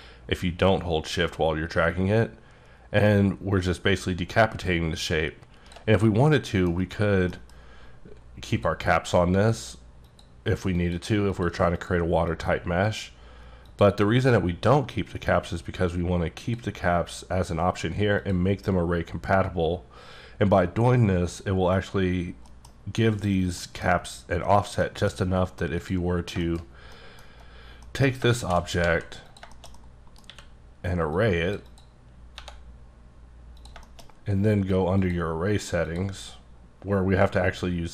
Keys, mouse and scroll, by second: 6.3 middle click, 7.3 F9, 8.5 click, 9.3 click, 10.1 click, 10.7 click, 11.3 click, 12.3 click, 12.8 click, 15.5 click, 16.4 click, 18.2 click, 22.6 middle click, 23.1 click, 23.6 middle click, 24.8 middle click, 25.8 click, 26.2-26.9 scroll down 3, 26.4 shift+middle click, 26.9 middle click, 27.5-27.9 scroll down 1, 27.9 middle click, 28.5 shift+d, 28.8 z, 29.3 click, 29.5 shift+middle click, 30.2 q, 31.1 click, 31.7 double click, 32.3 1, 32.8-33.6 scroll up 5, 33.6 click, 33.8 shift+middle click, 35.0 click, 35.8 click.